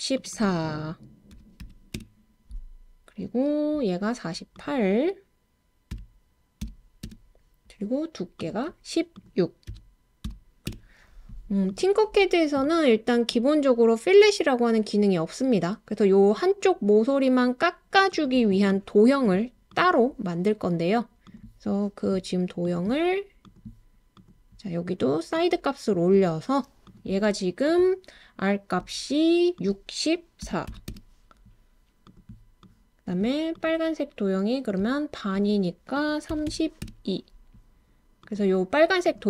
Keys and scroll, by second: 1.3-1.9 typing, 5.9-7.0 typing, 9.7-10.7 typing, 30.4-30.9 typing, 36.1-37.0 typing.